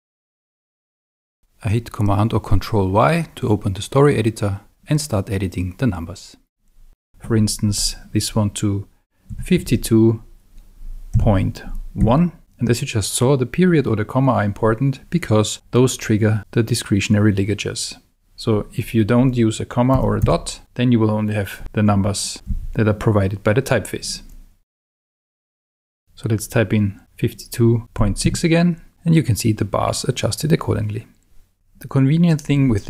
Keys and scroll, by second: 0.6 Escape, 3.3 super+y, 9.3 5, 9.6 2, 11.1 ., 12.0 1, 19.9 BackSpace, 21.6 5, 21.9 7, 22.5 1, 24.7 BackSpace, 27.8-28.7 typing.